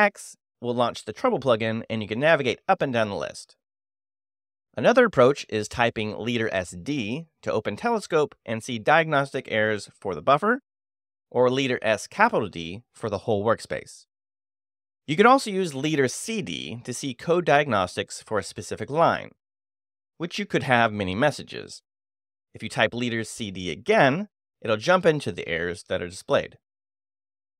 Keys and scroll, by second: 0.5-3.6 typing, 5.9 space, 6.1 s, 6.2 d, 10.4 Escape, 11.3 Escape, 15.8 space, 16.3 c, 17.3 d, 21.6 k, 22.9-25.2 typing, 27.1 k.